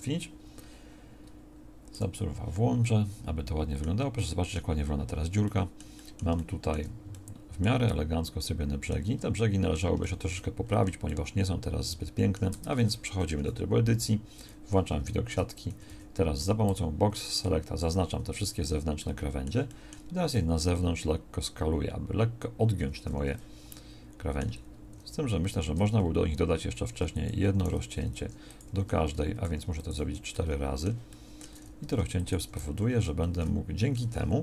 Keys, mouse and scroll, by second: 10.6-12.5 shift+middle drag, 12.5 Tab, 13.3 KP_1, 14.0 z, 15.6 a, 15.8 a, 16.6 b, 18.6 z, 25.4 ctrl+r, 29.5 ctrl+r, 32.8 a.